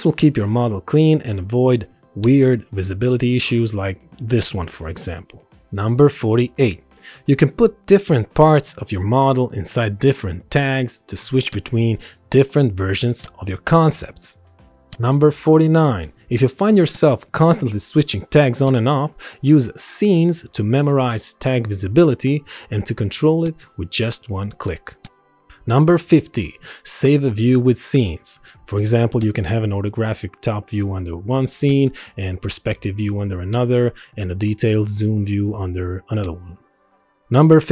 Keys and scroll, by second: 5.5 space, 14.7 space, 25.7 Escape, 33.7 Escape.